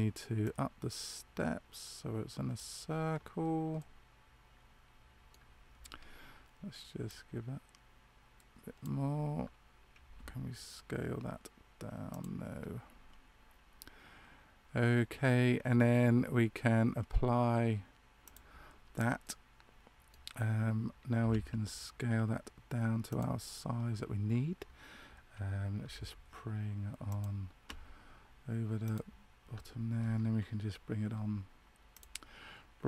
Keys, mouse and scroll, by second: 0.3 click, 3.7 middle click, 7.0 click, 10.0 s, 18.2 click, 19.1 middle click, 21.1 s, 28.8 click, 31.8 click.